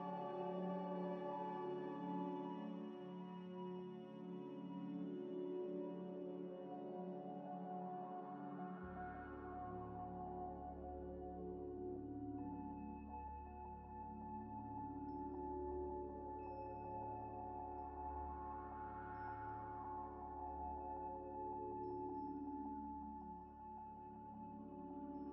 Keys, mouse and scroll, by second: 0.8 g, 0.9 x, 1.7 Tab, 2.0 g, 2.1 x, 3.3 ctrl+a, 3.7 ctrl+a, 6.4 Tab, 7.0 a, 7.2 e, 9.5 r, 10.4 ctrl+x, 11.5 3, 12.2 i, 13.2 e, 14.1 s, 14.8 ctrl+z, 15.2 2, 15.5 alt+click, 16.1 alt+click, 16.3 alt+shift+click, 17.6-18.3 scroll up 1, 18.4 double click, 18.9 alt+shift+click, 20.3 alt+shift+click, 20.3 alt+shift+click, 21.7 ctrl+b, 23.1 Tab, 23.6 middle click, 24.0 scroll down 1, 24.6 g, 24.7 z.